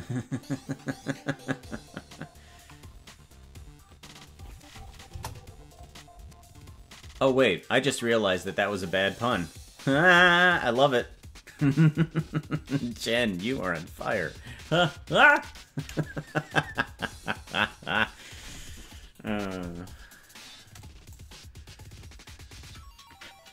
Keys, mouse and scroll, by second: 5.1 KP_0, 21.1-23.5 drag.